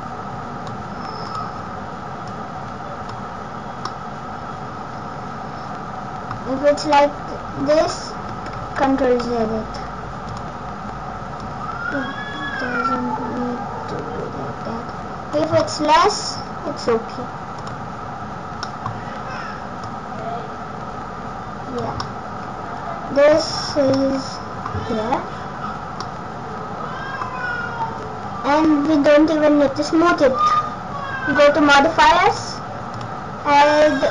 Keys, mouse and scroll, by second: 1.3 click, 2.3 click, 3.9 middle click, 7.0 middle click, 8.6 ctrl+z, 10.3 click, 11.4 click, 15.6 middle click, 17.5 click, 18.6 middle click, 19.8 click, 22.0 middle click, 23.5 Tab, 24.0 middle click, 25.5-26.0 scroll up 1, 26.0 middle click, 28.5 scroll up 2, 28.9-29.4 scroll down 5, 29.3 scroll up 3, 30.4 click, 32.3 click, 33.0 click.